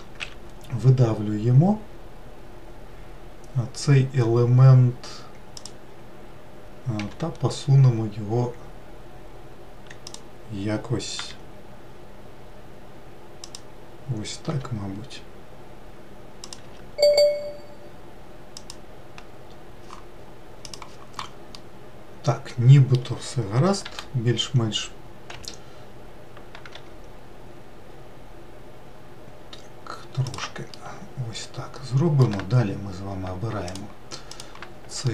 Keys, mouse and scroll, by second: 6.5 g, 10.7 r, 14.0 g, 16.1 s, 21.2-23.6 middle drag, 23.6 g, 30.4-33.4 middle drag, 33.4 ctrl+click, 34.0 ctrl+click, 34.8 alt+middle click.